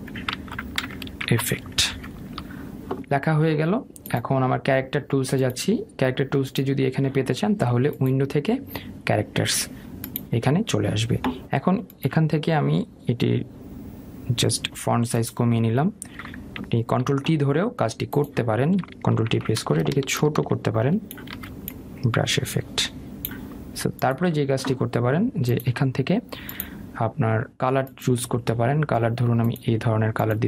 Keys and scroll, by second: 1.0 BackSpace, 17.9 ctrl+t.